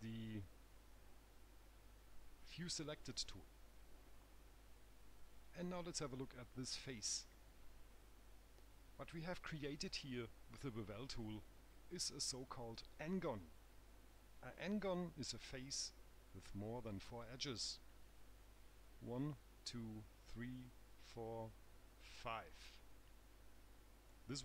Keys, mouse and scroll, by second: 6.4 right click.